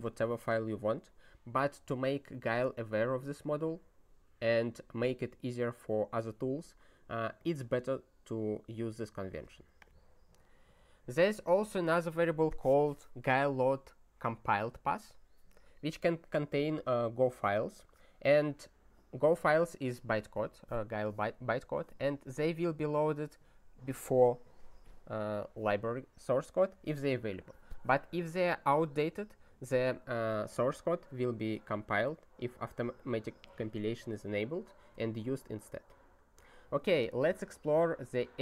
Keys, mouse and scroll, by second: 7.4 click, 9.4 click, 9.8 click.